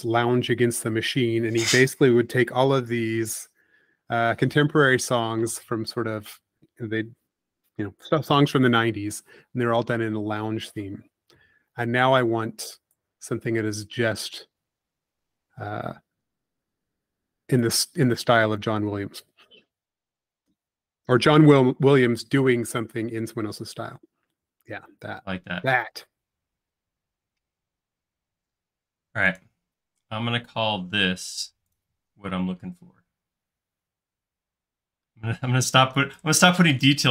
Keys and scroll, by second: 4.3 super+x, 8.6 i, 13.3 f, 17.0 p, 18.8 space, 22.9 p, 25.6 space.